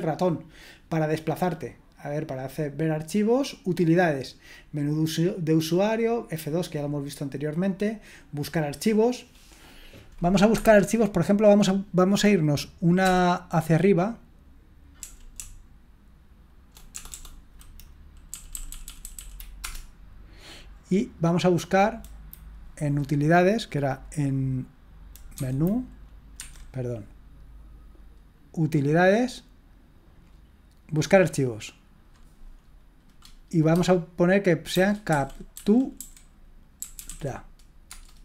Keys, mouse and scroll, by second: 1.2-4.3 drag, 10.5 Escape, 11.0 click, 11.8 click, 13.0 BackSpace, 15.0-17.1 typing, 18.3 Up, 18.5 Up, 18.7 Up, 18.9 Up, 19.0 Up, 19.2 Up, 19.6 Return, 25.3 F2, 26.4 Escape, 28.6 click, 31.5 click, 34.5-37.5 typing, 37.9 Return.